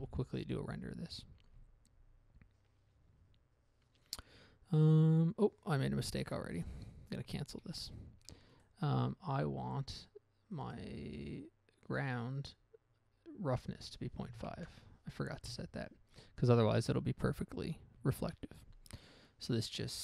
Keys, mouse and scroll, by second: 0.3 F12, 1.9-2.5 scroll down 1, 7.7 Escape, 8.4 Escape, 8.9 right click, 10.9 click, 12.2 click, 13.9 click, 14.8 typing, 15.8 Return, 18.3 F12.